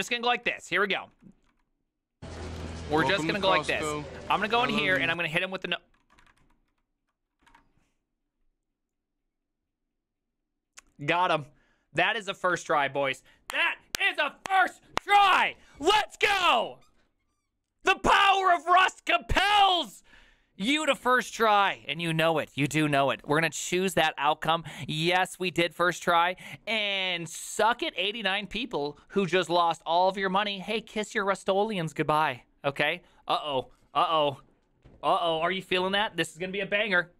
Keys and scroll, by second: 0.0-3.1 typing, 0.0 ctrl+d, 3.8 Up, 4.1-6.6 typing, 5.0 Return, 6.8 ctrl+u, 7.6 ctrl+d.